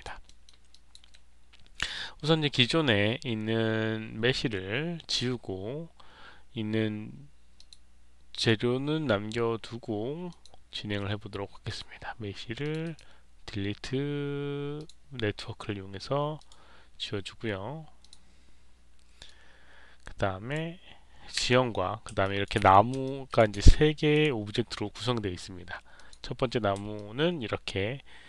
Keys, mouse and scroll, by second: 0.2 alt+middle click, 0.6 alt+click, 7.5 click, 8.3 click, 10.2 click, 11.6 click, 12.5 click, 12.7 right click, 14.7 click, 16.3 click, 17.9 click, 19.2-20.5 drag, 22.2 alt+click, 22.9 alt+click, 24.1 click, 25.9 click, 26.9-28.2 alt+drag.